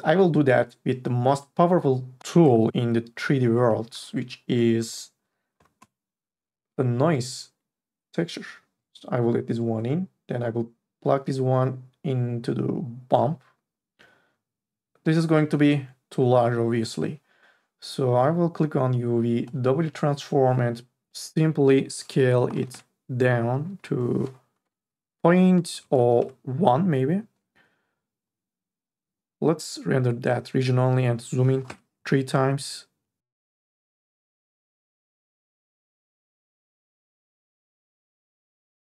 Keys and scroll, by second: 5.8 o, 22.7 Return, 24.6 BackSpace, 25.8 KP_0, 26.0 KP_1, 26.3 Return, 31.6 KP_3, 31.9 Return.